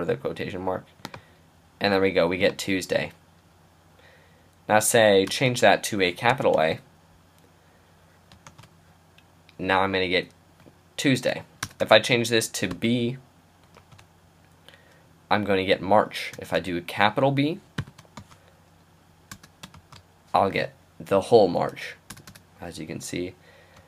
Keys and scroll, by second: 6.3 shift+a, 8.5 shift+', 12.9 b, 13.8 shift+', 17.8 shift+b, 19.7 shift+'.